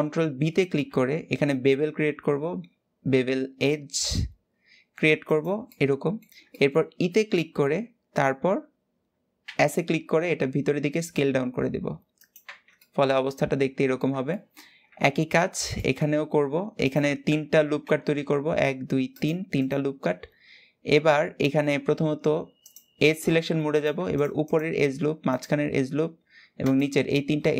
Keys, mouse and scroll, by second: 0.6 ctrl+b, 5.4-7.1 middle drag, 7.1 e, 12.1 Tab, 12.5-14.6 middle drag, 14.6 Tab, 15.0-15.4 scroll up 1, 15.4 shift+middle click, 16.1-16.5 scroll up 1, 16.5 click, 17.4 ctrl+r, 22.3 click, 23.4 click, 23.8 alt+shift+click, 24.2 alt+shift+click, 25.0 alt+shift+click, 26.3 alt+shift+click.